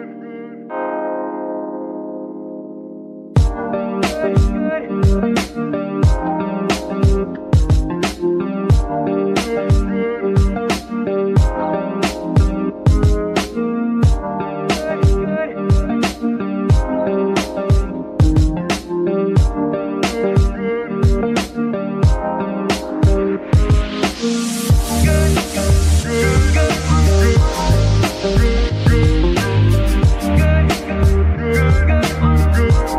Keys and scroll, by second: 0.3 m, 1.0 -, 2.6-6.2 typing, 8.4 g, 11.4 g, 12.1 Tab, 12.7 s, 13.8 Tab, 14.4 s, 15.6 KP_3, 16.2 KP_3, 17.8 g, 20.0 g, 22.0 z, 22.9 g, 26.4 Tab, 30.9 Tab.